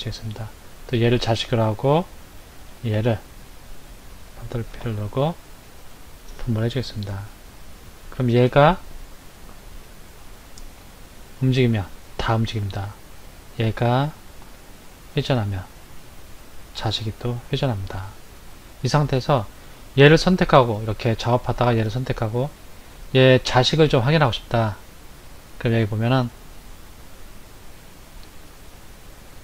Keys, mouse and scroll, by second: 0.3 click, 1.0 click, 2.8 shift+click, 4.8 ctrl+p, 6.9 click, 8.2 click, 10.9 r, 13.4 click, 14.5 r, 18.2 click, 19.7 click, 20.7 click, 21.8 click, 25.4 click.